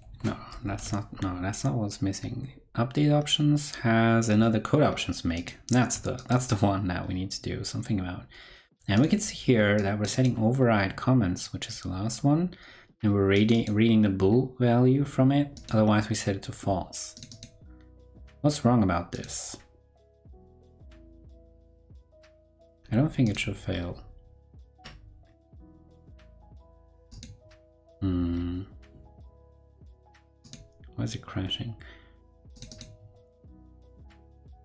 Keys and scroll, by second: 0.6 ctrl+super+Left.